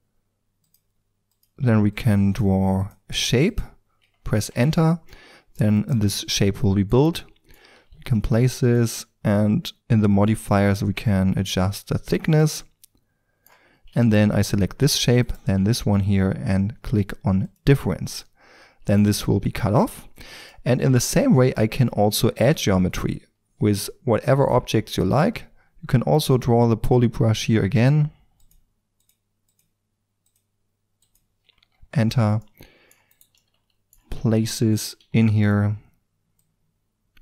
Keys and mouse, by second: 5.1-7.1 middle drag, 5.7-6.1 right drag, 7.4 middle click, 7.7 g, 10.1 click, 12.3 middle click, 13.3-15.2 middle drag, 15.2-17.4 right drag, 17.4-23.3 drag, 26.1-28.4 drag, 32.4-32.7 middle drag, 33.1-33.5 drag, 33.9 middle drag, 34.1 g, 34.7-37.2 drag, 34.9 r.